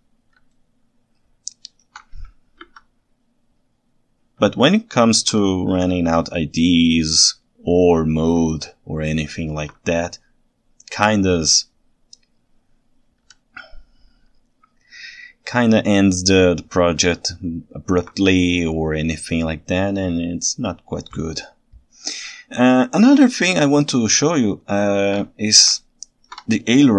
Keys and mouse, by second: 0.6-1.9 ctrl+shift+right drag, 2.6 KP_3, 4.9 ctrl+alt+right click, 8.7-9.6 ctrl+alt+right drag, 17.3-18.1 ctrl+alt+right drag, 24.2-25.1 ctrl+shift+right drag, 25.8 ctrl+alt+right click.